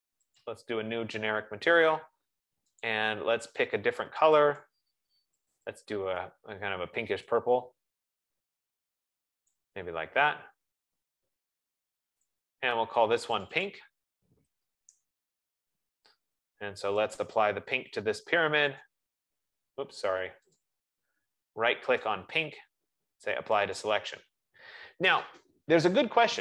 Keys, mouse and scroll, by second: 0.8 click, 3.1 click, 6.9 click, 10.8 click, 11.8 click, 12.8 click, 14.8 click, 15.6-16.8 typing, 18.3 click, 18.8 F15, 20.0 right click, 20.8 click, 22.9 right click, 24.8 click.